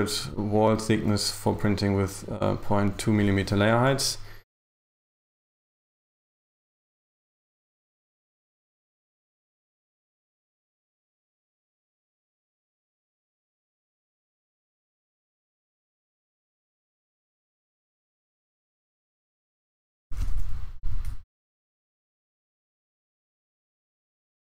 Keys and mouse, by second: 0.4 shift+right click, 2.4 shift+right click, 4.7 e, 5.1 g, 7.1 right click, 7.9 shift+right click, 8.7 right click, 9.5 shift+right click, 10.2 e, 10.7 g, 12.3 g, 14.8 right click, 15.9 right click, 16.6 right click, 18.2 shift+right click, 19.1 right click, 19.7 e, 20.0 Return, 20.3 g, 21.7 a, 22.2 space.